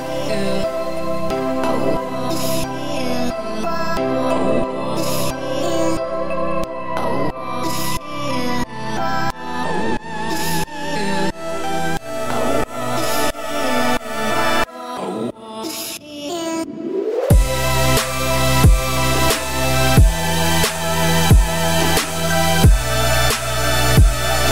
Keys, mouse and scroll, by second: 0.2 middle click, 0.8 scroll down 3, 1.1 `, 1.5 z, 1.7-2.0 scroll up 2, 2.4 click, 3.7-4.0 scroll up 2, 4.7 s, 6.6 z, 6.8 scroll down 4, 7.0-8.0 middle drag, 8.0 click, 8.7 alt+click, 9.0-10.3 middle drag, 10.3 shift+f, 12.8 ctrl+z, 13.2-14.5 middle drag, 14.5 alt+click, 15.2 middle click, 15.8 shift+d, 17.1 p, 17.7 Tab, 18.2 click, 18.9 Tab, 19.2 a, 20.0 f, 22.5 z, 23.6-24.4 scroll up 4, 24.4 g.